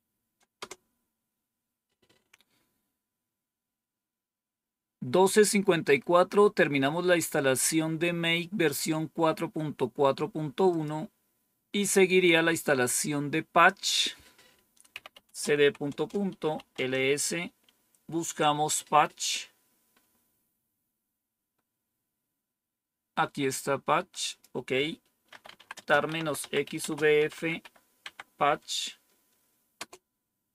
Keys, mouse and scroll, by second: 0.5 typing, 10.6 click, 13.8 click, 14.6-17.0 typing, 19.8-21.5 scroll up 1, 21.5-22.3 scroll up 1, 22.3-23.4 scroll up 1, 23.4 click, 24.2 click, 25.0-28.0 typing, 29.7 typing.